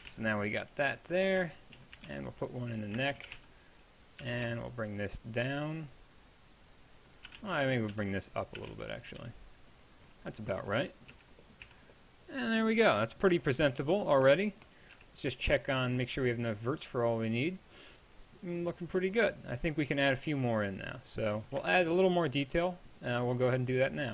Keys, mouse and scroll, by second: 0.0-0.6 typing, 2.1 ctrl+r, 3.3 a, 3.4 b, 4.2 g, 7.3-9.2 typing, 11.1 Tab, 11.7 z, 14.1 right click, 15.0 Tab.